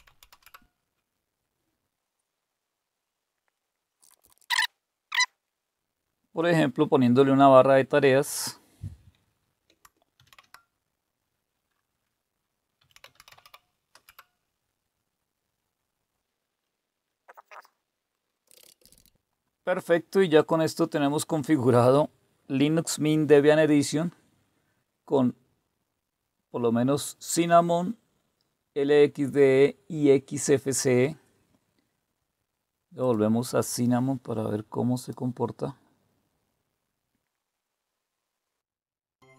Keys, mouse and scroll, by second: 0.0-0.7 typing, 3.7-4.9 typing, 10.2 ctrl+c, 12.5-14.0 typing, 16.6 right click, 17.1 click, 17.3 click, 18.2-19.5 typing, 18.2 click, 20.4 click, 33.0 click, 34.9 click.